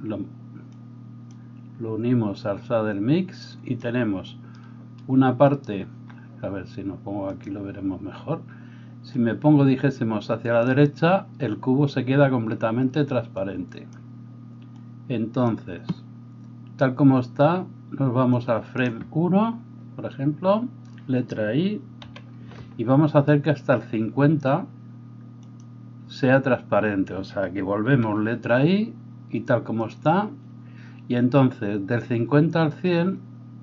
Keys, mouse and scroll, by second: 7.5-9.2 middle drag, 9.2-30.0 drag, 22.0 i, 30.0-33.6 middle drag.